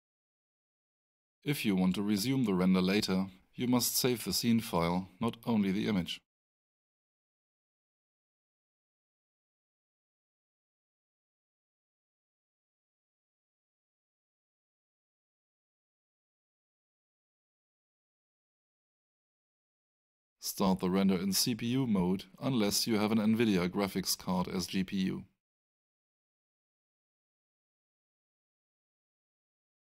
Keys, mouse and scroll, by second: 5.8 click, 9.1 click, 11.7 click, 14.1 click, 20.9 click.